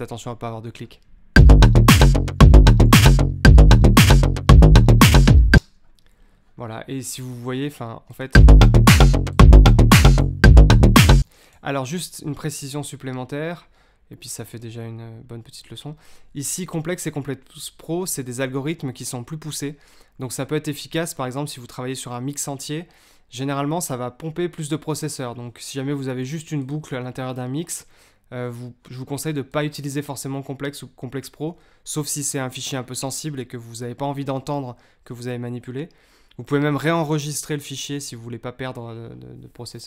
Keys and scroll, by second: 1.3 space, 5.5 space, 8.3 space, 11.1 space.